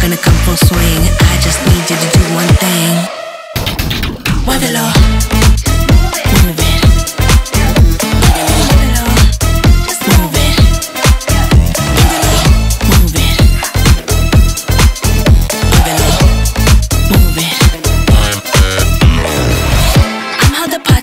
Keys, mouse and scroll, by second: 4.0-5.7 drag, 6.8-7.9 typing, 8.8-10.3 ctrl+drag, 14.4 click, 15.7 Tab, 18.0 Tab, 18.4 alt+click.